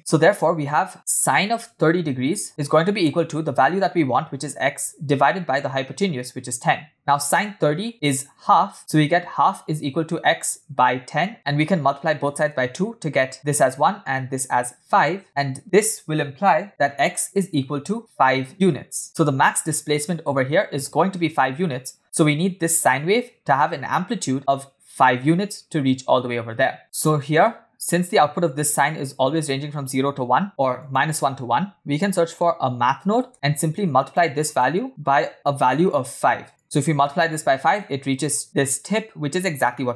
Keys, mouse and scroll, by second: 1.4 click, 2.1 click, 2.7 click, 4.1 click, 4.9 click, 5.7 click, 6.1 click, 8.0 click, 8.4 click, 9.3 click, 9.5 click, 10.0 click, 10.8 click, 11.1 click, 13.3 click, 14.3 click, 14.9 click, 16.7 click, 17.3 click, 17.6 click, 18.5-19.1 click, 19.0 click, 24.5 click, 26.8-27.1 scroll up 3, 27.3 middle click, 27.5 scroll down 1, 27.5-27.9 scroll up 1, 27.9 click, 30.3 shift+a, 34.9-35.9 drag, 36.6 click, 39.4-39.7 scroll down 3, 39.7-39.9 middle drag.